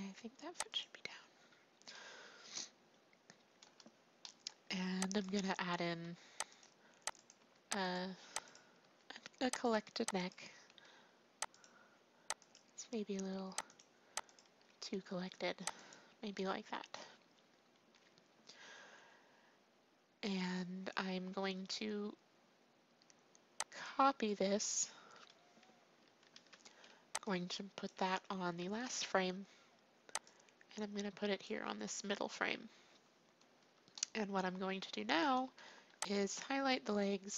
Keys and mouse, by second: 4.2-6.8 drag, 6.0 r, 7.5-10.2 drag, 7.7 r, 8.8 r, 10.6 r, 12.8 r, 14.6 r, 23.7-24.7 drag, 24.7 a, 24.9-26.3 drag, 24.9 a, 26.3 ctrl+c, 27.2-28.4 drag, 28.5 click, 28.6 ctrl+v, 30.2-35.0 drag, 31.9 ctrl+v, 35.4 a, 35.8 b.